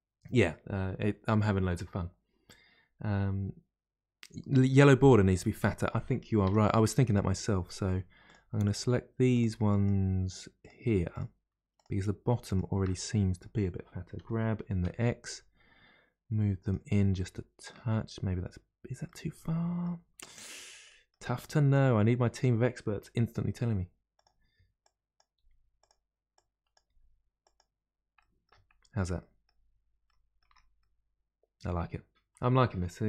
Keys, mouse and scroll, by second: 4.7-6.4 middle drag, 6.4 Tab, 6.6 middle click, 7.2-8.2 scroll up 1, 8.2 click, 8.6 shift+click, 9.3 shift+click, 9.7 shift+click, 10.6 shift+click, 11.1 shift+click, 11.7 shift+click, 12.4 shift+click, 12.9-14.2 middle drag, 14.2 g, 17.0-18.0 middle drag, 18.0-18.7 scroll down 1, 18.7-19.0 scroll down 1, 19.0-20.1 middle drag, 20.1-20.9 scroll up 2, 20.9 middle click, 21.7 click, 23.1 g, 24.8 click, 25.3 g, 26.3 click, 26.8 g, 28.1 middle click, 28.7-29.2 scroll down 1, 29.2-30.5 middle drag, 30.5 Tab, 30.8-33.0 middle drag.